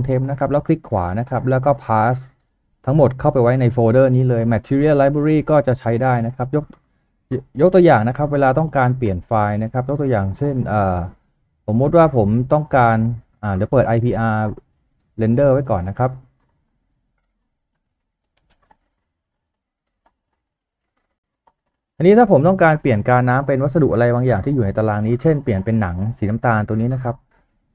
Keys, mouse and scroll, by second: 0.5 right click.